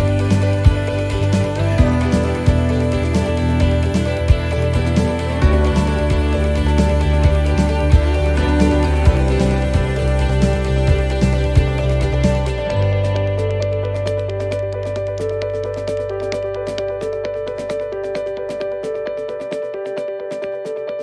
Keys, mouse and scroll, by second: 0.3 shift+middle click, 0.9-1.5 scroll up 5, 1.7 shift+middle click, 2.3 scroll down 3, 2.6 middle click, 3.2-3.9 scroll down 5, 3.9 middle click, 4.3 shift+middle click, 4.8 middle click, 5.6 shift+middle click, 5.9-6.3 scroll up 4, 6.4 shift+middle click, 8.3-13.9 click, 18.1 middle click, 18.5-19.5 scroll down 6, 19.5 click.